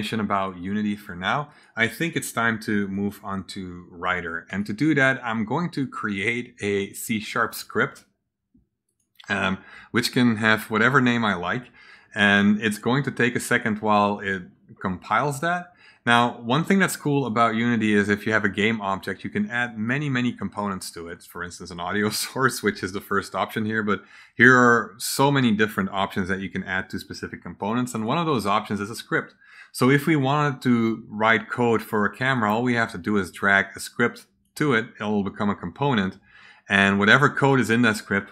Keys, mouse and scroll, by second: 1.4 click, 2.8 click, 4.4 right click, 6.1 click, 7.3 click, 8.8 click, 17.0 click, 19.6 click, 23.6-24.1 scroll down 1, 24.4-25.2 scroll up 3, 27.9 click, 30.1 click, 32.3-34.4 drag.